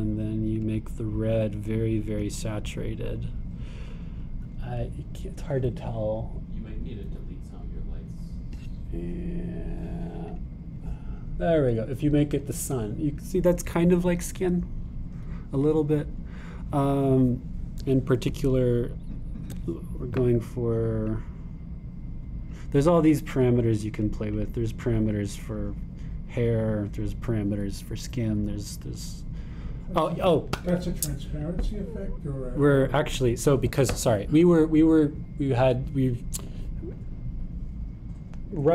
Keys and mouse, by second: 1.5 click, 11.3 click, 22.1-25.0 drag, 25.3 click, 32.9 click, 38.6-38.7 drag.